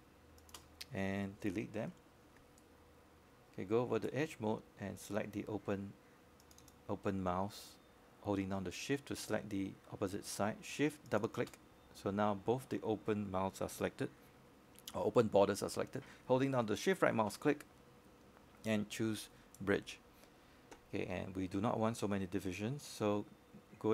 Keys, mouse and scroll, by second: 6.2 alt+middle click, 6.7 alt+click, 7.6 scroll up 1, 8.0 alt+middle click, 9.2 right click, 10.2 click, 11.3 shift+click, 12.8 Delete, 13.6-15.5 right drag, 17.4 click, 22.4 shift+click.